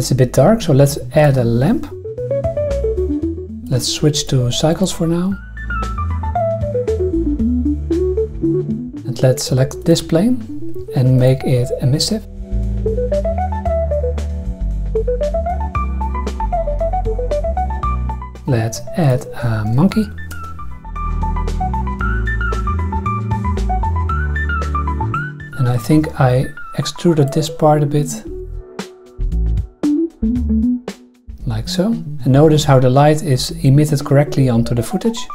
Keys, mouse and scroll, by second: 0.7 shift+a, 2.1-3.5 typing, 2.4 click, 2.9 KP_Subtract, 3.1 KP_Enter, 3.5 click, 4.1-5.0 drag, 5.6-6.5 drag, 7.3 click, 8.2 click, 9.3 Tab, 9.8 click, 11.2 click, 12.3 click, 13.0 click, 13.4 click, 14.0 drag, 14.5 click, 15.2 Tab, 16.0 click, 16.9 click, 18.3 shift+a, 21.0-24.0 typing, 22.1 click, 25.3 Tab, 25.7 click, 26.0 e, 27.2 click, 28.0 alt+click, 28.0 alt+middle click, 29.4 click, 30.1 click, 32.5 click, 32.8 g, 33.0 click.